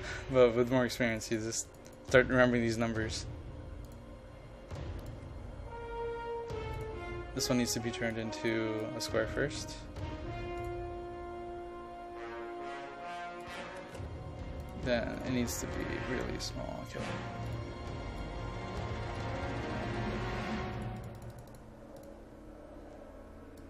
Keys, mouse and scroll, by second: 0.0-0.5 typing, 1.0 click, 9.2 KP_0, 9.5 KP_Decimal, 9.7 KP_5, 10.7 click, 13.7 KP_0, 13.9 KP_Decimal, 14.0 KP_5, 14.7-19.6 drag, 19.6 KP_1, 19.8 KP_2, 20.1 KP_5, 20.8 click.